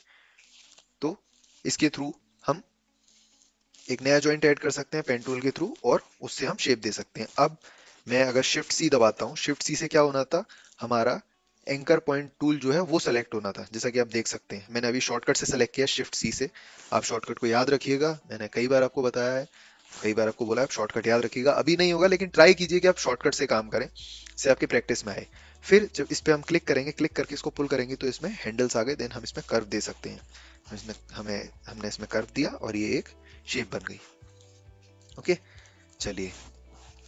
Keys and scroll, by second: 8.6 a, 8.9 shift+c, 36.6 v.